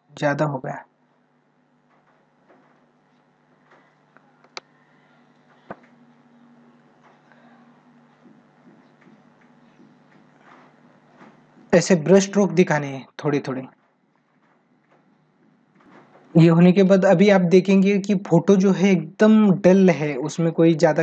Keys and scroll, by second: 4.2 ctrl+alt+z, 11.4 ctrl+alt+z, 20.3 ctrl+=.